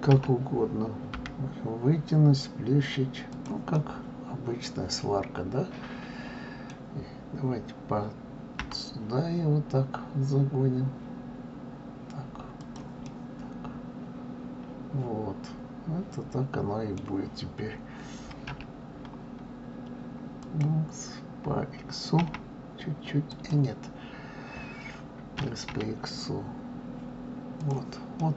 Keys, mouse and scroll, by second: 3.7-6.7 middle drag, 13.0-16.1 middle drag, 28.2-28.3 middle drag.